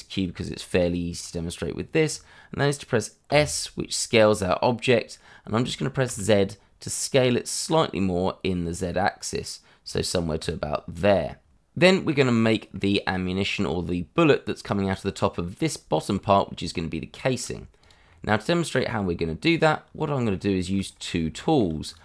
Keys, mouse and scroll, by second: 3.3 s, 6.0 z, 10.4 click, 12.0 middle click, 14.7 middle click, 16.7 shift+middle click, 17.8 click, 18.1 middle click, 18.9 Tab, 20.3 shift+middle click, 20.5 shift+middle click, 20.8 middle click, 20.9-21.4 scroll up 1, 21.4 shift+middle click, 21.8 click.